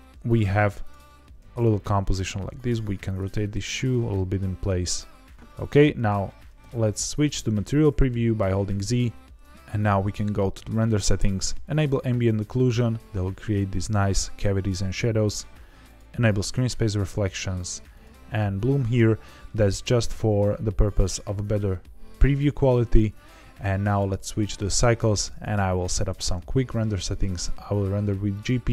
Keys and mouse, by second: 0.2 click, 0.7 shift+click, 1.1 r, 1.3 z, 3.0 click, 3.3 g, 3.6 shift+z, 5.5 click, 6.5 z, 9.7 click, 11.6 click, 15.8 click, 17.9 click, 23.9 click, 26.9 click.